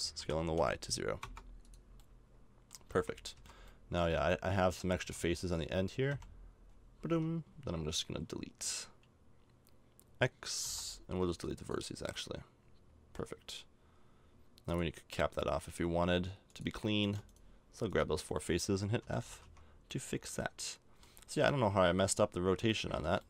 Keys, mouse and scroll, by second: 0.2 s, 2.1 middle click, 2.8 a, 2.9 Tab, 3.4 z, 4.0 z, 5.0 z, 6.1 KP_5, 7.1 Tab, 10.6 x, 12.3 middle click, 12.8 middle click, 17.0-19.0 right drag, 19.0 f, 19.3 a, 19.4 Tab, 20.3 middle click, 22.1 middle click.